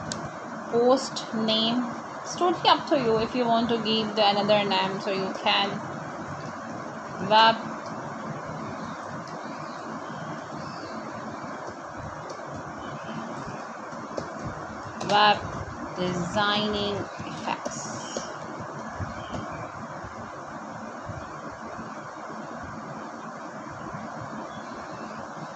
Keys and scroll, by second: 0.0-4.3 typing, 14.3 BackSpace, 17.1 Return, 19.4 shift+,, 19.9 u, 20.2 l, 22.0 space, 22.3 c, 22.6 l, 23.2 Return, 24.3-25.5 typing.